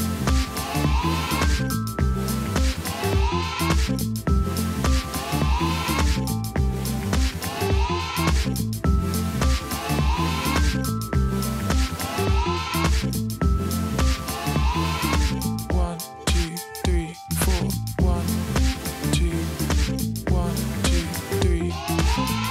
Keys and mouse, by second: 0.4 click, 2.2 click, 3.7 click, 5.2 click, 6.1 click, 6.8 click, 7.3 click, 7.7 right click, 8.1 click, 9.4 right click, 10.0 click, 11.0 click, 12.6 click, 13.0 t, 13.4 alt+click, 14.1 click, 14.4 Return, 14.6 click, 16.3 click, 18.0 Return, 18.3 Return, 20.5 click, 22.3 click.